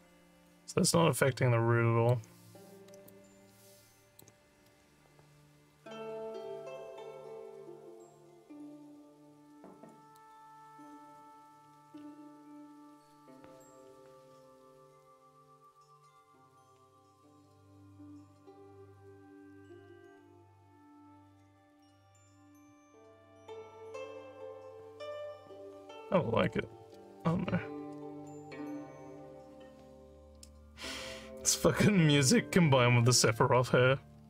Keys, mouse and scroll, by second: 0.5-2.1 alt+drag, 3.1-4.2 alt+drag, 10.2 click, 15.6 click, 18.9 click, 21.8-26.5 alt+drag.